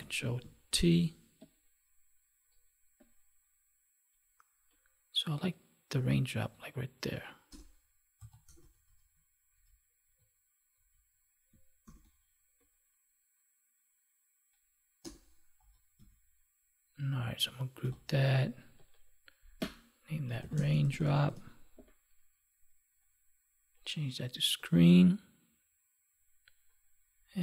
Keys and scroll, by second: 0.6 ctrl+t, 11.8 ctrl+t, 17.8 ctrl+g, 20.5 space.